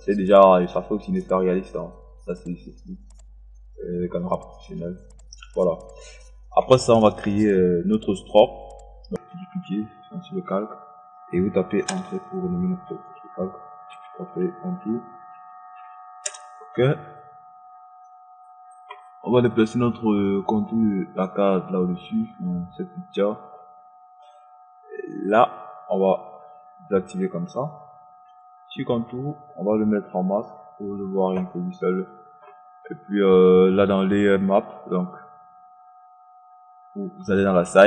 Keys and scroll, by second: 11.5 Return, 15.9 Return.